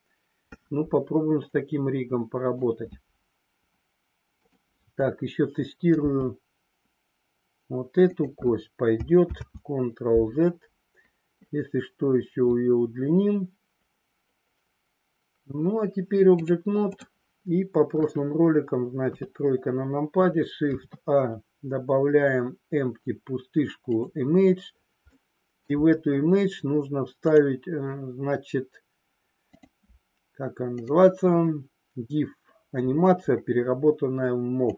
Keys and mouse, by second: 1.4-2.5 middle drag, 8.0 click, 9.4 ctrl+z, 16.4-17.0 drag, 19.0 KP_3, 20.6 shift+a, 25.1-25.5 middle drag, 27.3 click.